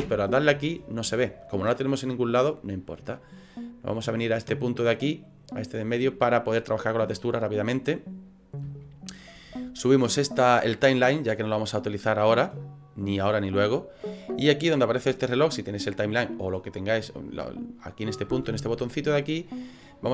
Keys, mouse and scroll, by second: 0.0 /, 4.5 click, 6.5 middle click, 8.8 shift+middle click, 12.1 click.